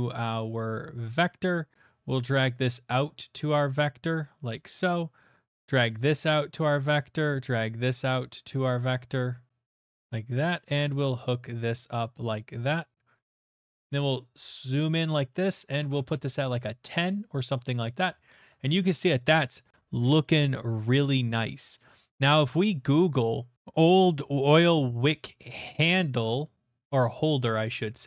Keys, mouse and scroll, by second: 1.1 click, 2.5 click, 2.7 click, 4.7 click, 6.6 click, 9.7 click, 12.1 click, 12.7 middle click, 13.5-14.5 scroll, 15.1 click, 15.8 typing, 16.0-17.4 Return, 17.4 middle click, 18.0 middle click, 18.4 shift+middle click, 18.9 shift+middle click, 19.0 middle click, 19.8-20.1 scroll, 20.4 middle click, 20.7 shift+middle click, 21.3 shift+middle click, 22.1 shift+middle click, 23.5 click, 25.5 click, 27.4 click, 27.8 ctrl+z.